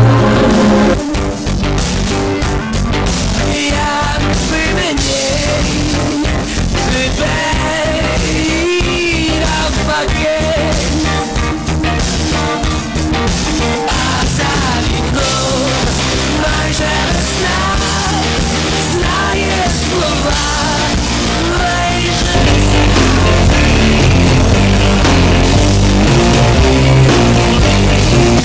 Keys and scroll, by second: 0.8 Page_Down.